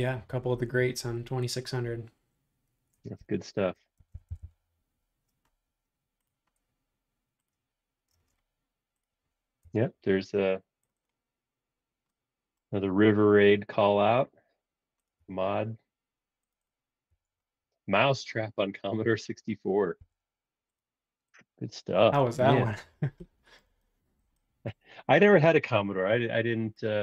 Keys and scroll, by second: 3.5-4.9 typing, 8.1 space, 9.7 BackSpace, 14.1 BackSpace, 15.1 BackSpace, 17.1 BackSpace, 20.0 l.